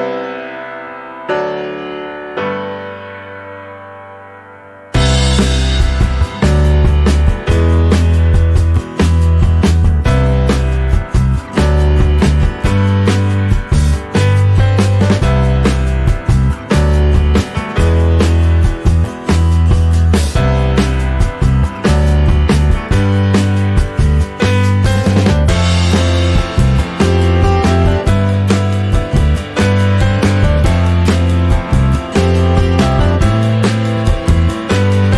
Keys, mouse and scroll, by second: 0.0 click, 0.2-3.7 shift+middle drag, 5.1 ctrl+s, 5.4-6.4 shift+middle drag, 6.4 ctrl+s, 6.7-10.6 ctrl+middle drag, 10.6 ctrl+s, 10.9 middle click, 11.5-14.6 drag, 14.6-16.0 scroll up 2, 16.0-18.9 drag, 18.9 n, 20.1-21.8 drag, 21.8-22.5 scroll down 3, 22.5-23.5 scroll down 1, 23.5 click, 23.5 scroll up 1, 24.3-24.6 scroll down 1, 24.6-27.3 middle drag, 27.3 scroll up 2, 27.9-32.7 drag, 32.7-33.6 scroll down 3, 33.6 click, 34.9-35.1 scroll down 13.